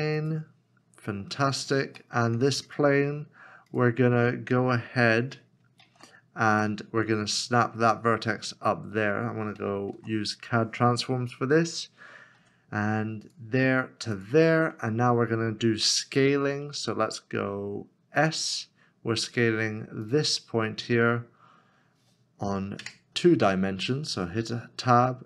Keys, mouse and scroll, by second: 1.4 scroll up 1, 2.1 shift+middle click, 5.6 g, 5.8 shift+z, 8.9 shift+z, 9.2-9.5 scroll up 1, 9.9 alt+c, 12.4 g, 14.5 scroll down 1, 16.2-18.1 scroll down 1, 18.1 scroll up 1, 18.2 s, 22.8 s, 22.8 Tab.